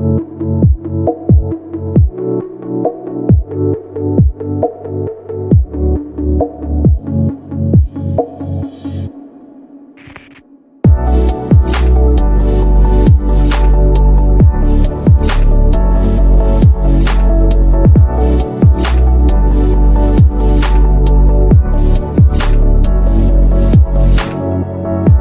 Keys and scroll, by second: 7.0 space, 8.1 z.